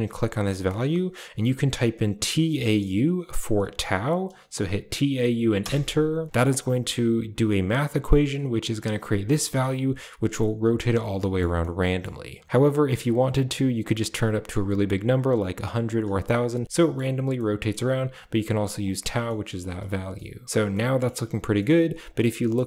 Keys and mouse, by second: 11.1 middle drag, 11.4-11.9 middle drag, 12.4-15.9 drag, 16.6 middle click, 16.7 middle click, 17.3 middle click, 18.7 click, 19.3 middle click, 20.1-20.4 middle drag, 20.7 middle click.